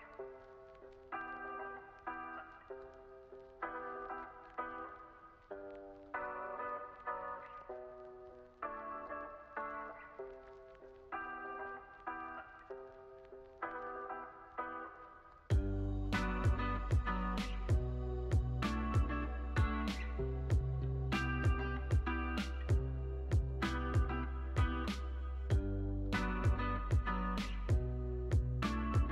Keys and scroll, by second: 0.2 z, 3.0 x, 4.0 z, 10.5 x, 16.1 x, 19.2 F9.